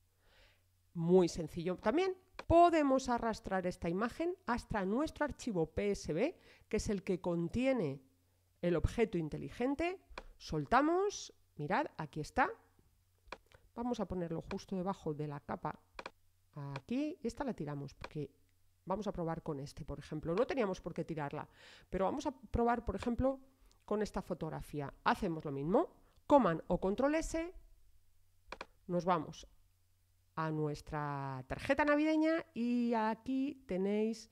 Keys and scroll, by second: 26.7 super+s.